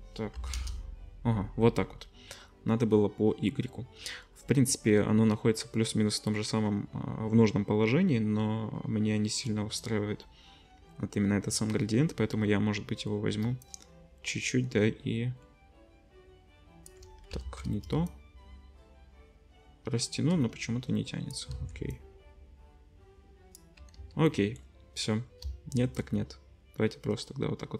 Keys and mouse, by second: 17.4 ctrl+z, 21.6 ctrl+z, 23.9 ctrl+z.